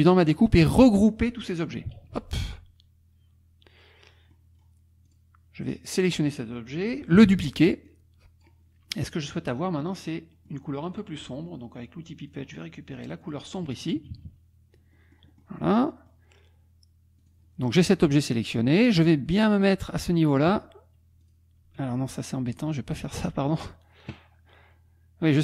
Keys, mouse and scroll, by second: 2.2 ctrl+g, 4.3 click, 7.3 ctrl+d, 7.9 click, 9.9 middle click, 10.3 middle click, 10.9 middle click, 12.3 click, 13.2 click, 14.1 KP_Subtract, 14.9 click, 15.9 click, 17.2 click, 21.2 click, 21.9 click, 22.5 click.